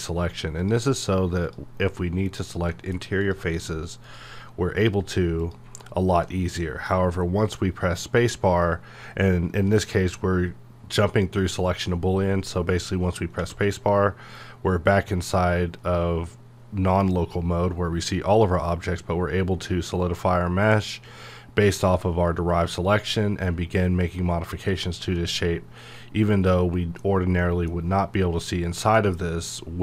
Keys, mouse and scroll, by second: 0.0 click, 2.7 middle click, 3.2 click, 6.3-15.6 middle drag, 18.3 click, 22.8 click, 23.4 middle click, 23.5 scroll down 1, 25.2-27.4 middle drag.